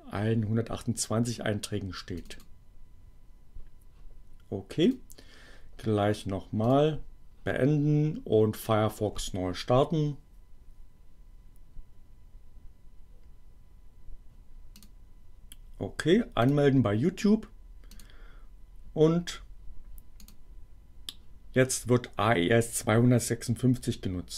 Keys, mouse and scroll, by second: 2.2 click, 4.8 click, 6.6 click, 8.5 click, 14.7 click, 16.0 click, 17.8 click, 20.2 click.